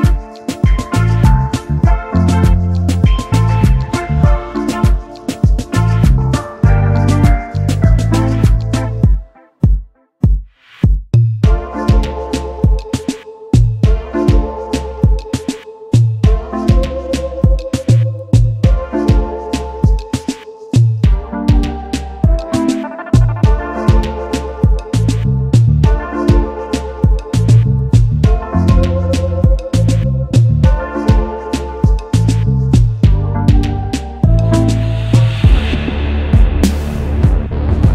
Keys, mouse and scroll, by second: 3.9-4.4 alt+scroll down 1, 4.4 alt+scroll up 1, 4.9-6.5 scroll down 1, 6.7-7.0 alt+scroll down 1, 7.0 alt+scroll up 1, 10.7 space, 10.8 double click, 11.2-11.7 alt+scroll down 1, 11.7 alt+scroll up 1, 13.2 alt+shift+click, 14.4 alt+shift+click, 15.5 shift+click, 16.6-17.0 alt+scroll down 1, 17.0-17.6 alt+scroll up 1, 24.3-25.2 typing, 30.2-30.9 typing, 35.6-36.4 typing.